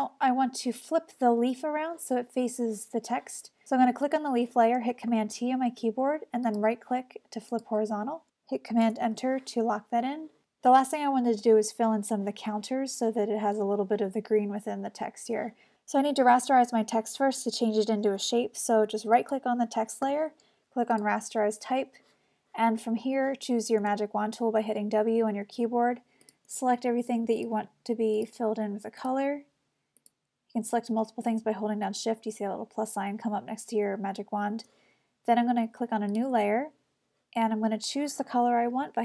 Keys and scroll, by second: 5.1 super+t, 8.9 super+Return, 23.8 w.